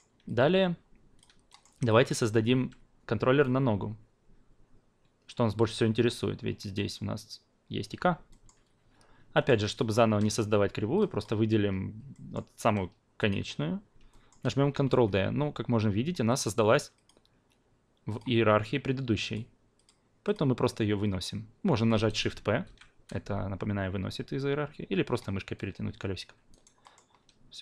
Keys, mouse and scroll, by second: 0.2-1.5 alt+drag, 1.5-1.9 alt+middle drag, 1.9-8.2 alt+drag, 8.3 alt+middle click, 9.3 alt+middle click, 9.7 alt+middle drag, 10.9 drag, 12.1 alt+middle click, 13.2 click, 14.1 alt+middle click, 14.7 ctrl+d, 16.3 click, 16.9-20.3 drag, 22.6 shift+p, 26.5 alt+right click, 26.8 alt+middle drag.